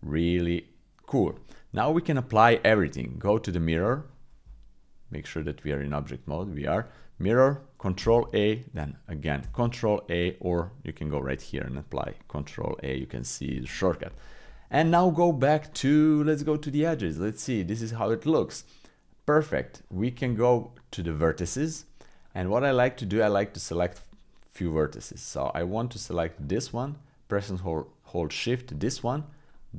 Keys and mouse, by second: 4.4 Tab, 8.0 ctrl+a, 9.4 ctrl+a, 10.6-12.0 drag, 13.0 click, 14.8 Tab, 16.8-19.0 drag, 20.2 Tab, 22.2 click, 22.8 click, 23.3 middle click, 26.3 click, 28.4-29.7 shift+drag.